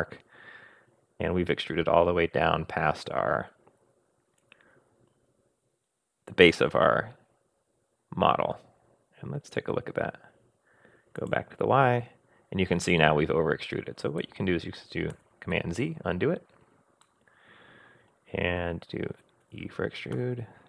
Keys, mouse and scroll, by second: 2.3 click, 2.6 middle click, 2.9-5.0 drag, 5.0-7.0 middle drag, 7.0 click, 7.1 middle click, 7.6 click, 7.9-9.7 middle drag, 11.2 click, 12.0 scroll down 2, 15.1 super+z, 17.0-18.4 middle drag, 18.2 scroll up 1, 19.4 e.